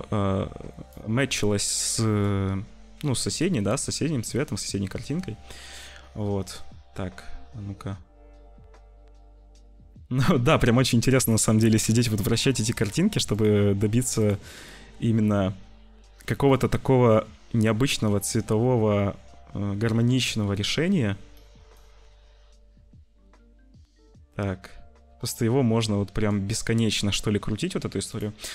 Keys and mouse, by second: 2.2-4.3 drag, 9.9-11.3 middle drag, 11.5 middle click, 12.5 middle click, 13.3 click, 14.6 click, 16.5 click, 19.8-21.3 middle drag, 21.6-23.6 middle drag.